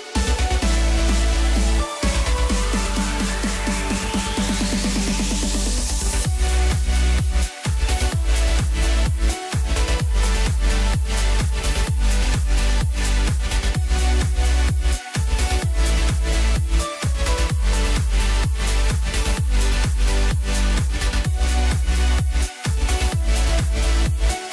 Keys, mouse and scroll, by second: 0.2 KP_3, 2.6 g, 7.5 s, 8.7 s, 12.5-13.1 scroll up 3, 13.8 g, 17.6-17.9 scroll down 2, 18.0-20.0 middle drag, 20.0 KP_0, 21.6-22.1 drag, 22.1-22.7 scroll up 1, 22.7-23.0 scroll up 2, 24.2-24.5 scroll down 1.